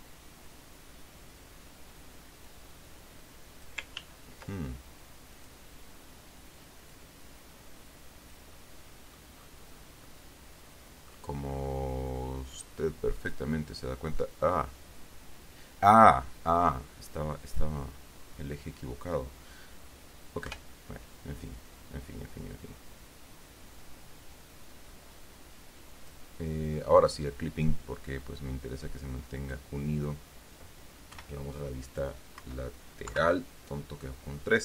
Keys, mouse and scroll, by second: 2.8-4.2 drag, 4.3 ctrl+z, 5.7 click, 7.3-8.9 drag, 8.9 middle click, 9.7 scroll down 1, 10.4-11.6 middle drag, 11.7-12.0 scroll up 2, 12.9 click, 13.5 click, 14.5-16.4 middle drag, 17.8 click, 20.8 KP_1, 22.1-22.5 scroll up 2, 24.1-26.6 drag, 27.3 click, 28.5-30.1 drag, 31.5 KP_1, 32.7 KP_1, 33.5 KP_3, 34.5 scroll down 1.